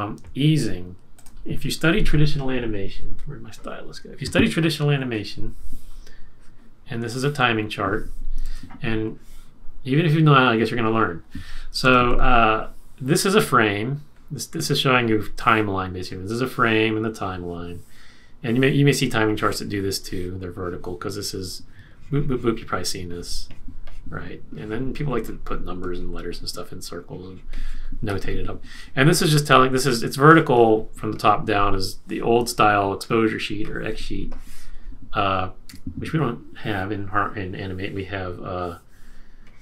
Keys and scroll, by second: 8.4 super+z, 11.8 super+z, 35.6 BackSpace.